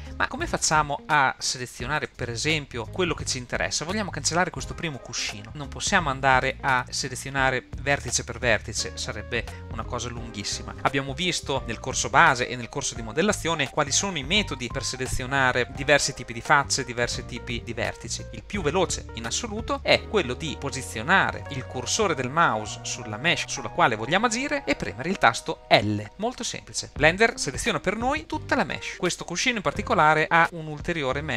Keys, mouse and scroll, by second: 0.4 middle click, 1.0-1.3 scroll up 3, 1.7 shift+middle click, 2.8 middle click, 3.8 scroll up 2, 4.3-5.5 shift+middle drag, 5.5 click, 5.7 scroll up 2, 6.5 shift+middle click, 26.0 l, 29.4-30.1 middle drag.